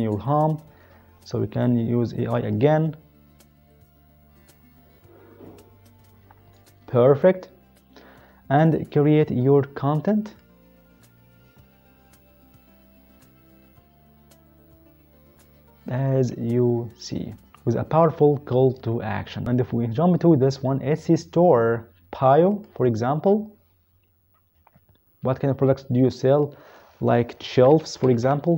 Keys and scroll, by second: 27.4-28.2 typing.